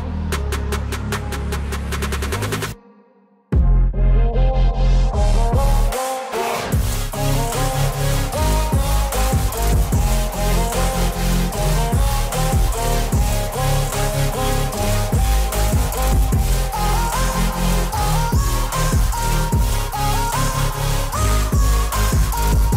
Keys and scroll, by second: 1.8 ctrl+z, 8.9 ctrl+z.